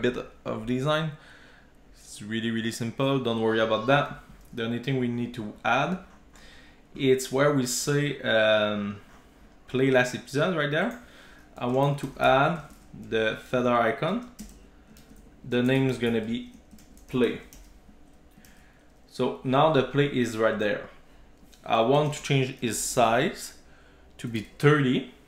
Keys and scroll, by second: 14.2 Return, 18.4 super+s.